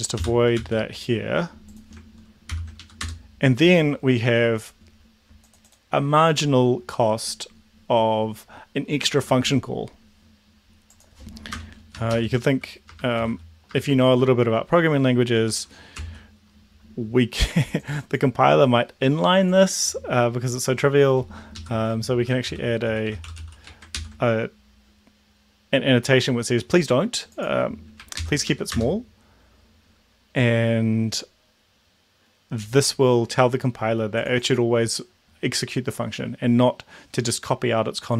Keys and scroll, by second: 0.2 ctrl+/, 0.6 ctrl+s, 2.5 ctrl+l, 2.8 Up, 3.1 Return, 11.6 Return, 11.9-14.1 typing, 15.4 Tab, 16.0 ctrl+s, 21.6 Left, 21.9-23.9 typing, 23.9 ctrl+s, 28.2 ctrl+l, 28.5 Up, 28.8 Return.